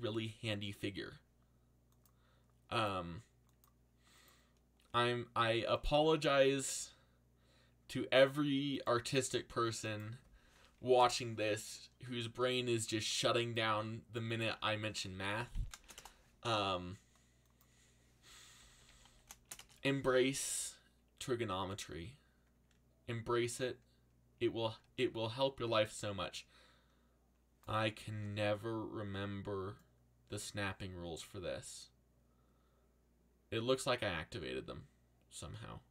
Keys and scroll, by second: 4.8 g, 6.1 r, 10.3-11.3 typing, 15.0-16.3 typing, 18.3-19.9 typing, 28.0 ctrl+z.